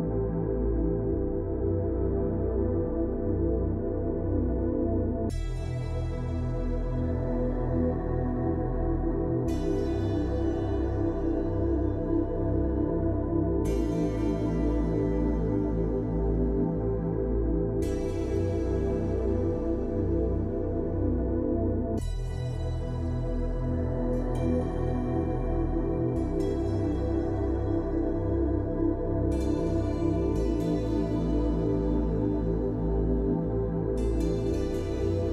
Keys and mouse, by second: 3.2 g, 10.6 click, 11.2 click, 12.2-12.6 drag, 12.7 shift+click, 19.6-20.2 middle drag, 20.5 click, 21.2 shift+middle drag, 23.2 click, 23.6 shift+click, 25.9-26.6 middle drag, 27.0-27.4 middle drag, 28.8 shift+middle click, 31.0-32.3 middle drag.